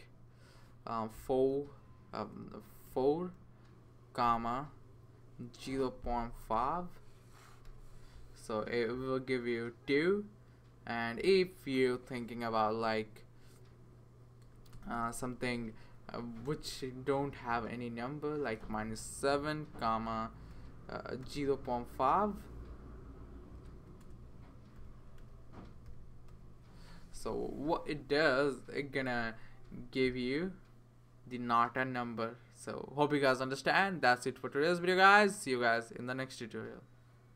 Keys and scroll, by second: 1.1 2, 2.6 BackSpace, 2.9 4, 4.2 ,, 5.7 0, 6.5 ., 7.6 5, 14.4-17.2 typing, 18.6 7, 20.5 ., 21.2 0, 23.7-26.4 typing.